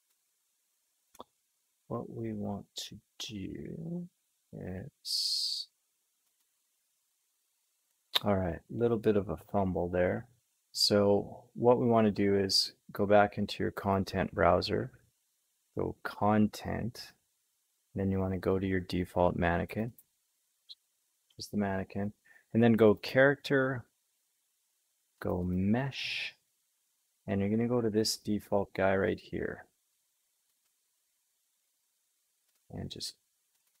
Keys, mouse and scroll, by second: 0.0-5.0 drag, 6.3-11.4 drag, 13.8-18.9 drag, 19.7-30.5 drag, 30.6-33.8 right drag.